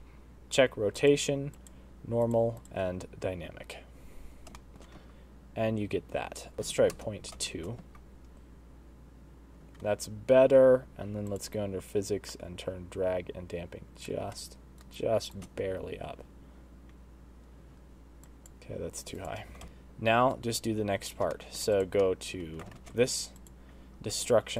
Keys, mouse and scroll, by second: 0.9 click, 2.6 click, 3.5 space, 4.5 shift+space, 4.7 shift+middle click, 6.2 space, 6.5 click, 6.5-6.9 scroll down 10, 7.5 shift+right click, 7.8 space, 9.7 space, 10.1-10.5 scroll up 5, 11.3 click, 12.3 click, 14.8 shift+right click, 15.9 space, 17.8 space, 18.2 click, 19.6 middle click, 19.6 click, 19.6 shift+right click, 19.6 shift+space, 21.3 middle click, 21.7 click, 21.9 middle click, 22.7 alt+shift+z, 23.3 click, 24.1 g.